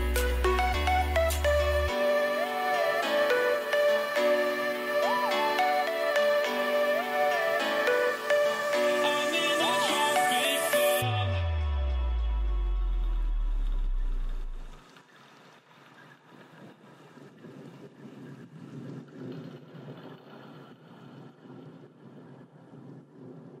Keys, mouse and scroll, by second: 1.8-3.0 right drag, 3.0 KP_3, 3.8 z, 7.5 ctrl+b, 20.8-23.6 middle drag, 22.8 a.